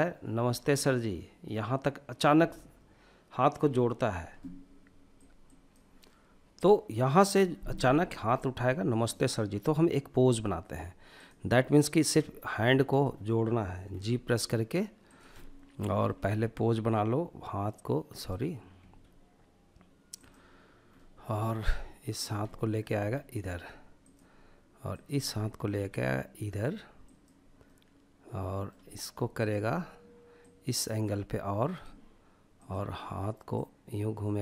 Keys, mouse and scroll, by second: 6.9-10.1 middle drag, 10.1-11.1 drag, 11.5-12.9 middle drag, 12.9 g, 14.1 drag, 14.3-15.2 middle drag, 15.2 g, 17.1 right click, 17.8 g, 19.1-19.9 drag, 19.9-20.8 middle drag, 21.1 click, 21.4-21.9 middle drag, 21.9 g, 23.0-24.1 drag, 24.2 middle click, 24.7 g, 26.0-26.6 drag, 26.6-27.6 middle drag, 28.3-29.0 drag, 29.3 click, 31.5-34.4 drag.